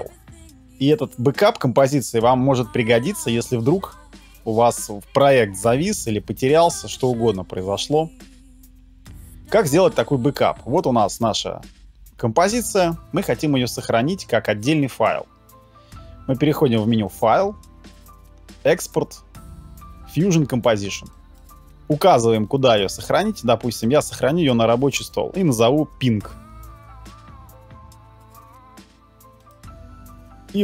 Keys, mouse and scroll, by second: 26.3 k.